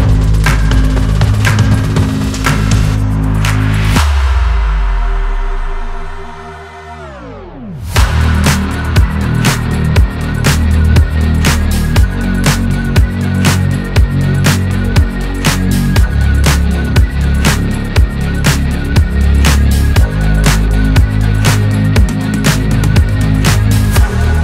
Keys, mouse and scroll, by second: 1.1 click, 1.4-2.1 middle drag, 2.1 click, 2.3-2.6 scroll up 3, 2.6-3.2 shift+middle drag, 3.2 scroll down 2, 4.2 click, 4.9 /, 5.2 middle drag, 5.4 scroll up 1, 5.7-10.2 shift+middle drag, 10.2-10.8 drag, 10.8 Tab, 11.2 middle click, 12.0-12.4 scroll up 1, 12.4 scroll down 1, 12.6-13.9 middle drag, 13.9 click, 14.4 middle click, 15.2-16.0 scroll up 1, 16.0 ctrl+click, 16.8-18.0 middle drag, 18.0 ctrl+click, 20.2-21.2 drag, 21.7 Tab, 21.9 scroll down 3, 22.2-23.5 middle drag, 23.5 scroll up 2, 23.7-24.4 middle drag.